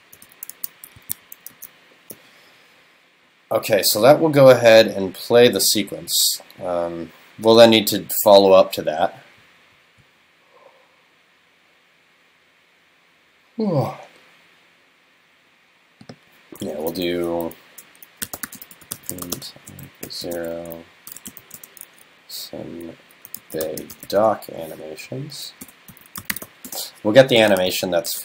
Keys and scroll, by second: 1.6 super+s.